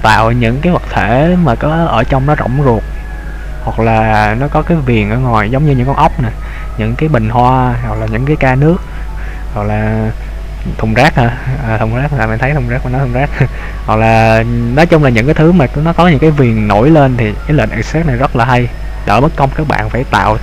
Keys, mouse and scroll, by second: 0.9 middle click, 17.9-18.7 scroll up 2, 18.7 shift+middle click.